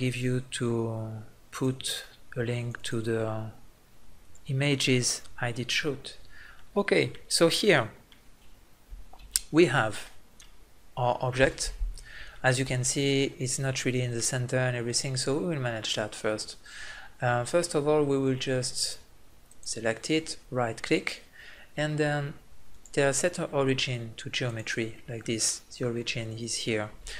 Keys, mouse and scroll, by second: 6.6-8.1 middle drag, 9.2 KP_Decimal, 18.4-19.5 middle drag, 19.5-22.7 right drag, 22.7-24.5 drag, 25.2-27.1 middle drag.